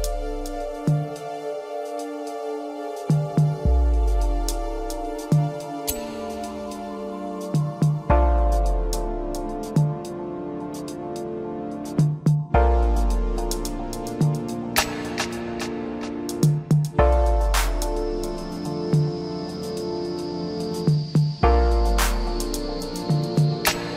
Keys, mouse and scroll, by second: 4.2-5.3 middle drag, 5.3 KP_1, 7.0 ctrl+r, 9.1-10.9 middle drag, 10.9 KP_3, 12.0 ctrl+r, 15.6-17.0 middle drag, 17.0 KP_3, 18.4 click, 19.7 3, 21.1 click.